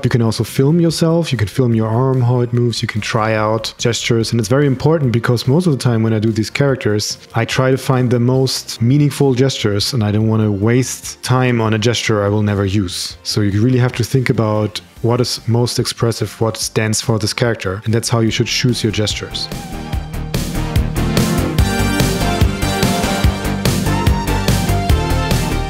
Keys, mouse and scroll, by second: 24.6 super+z, 24.8 click, 25.2 click.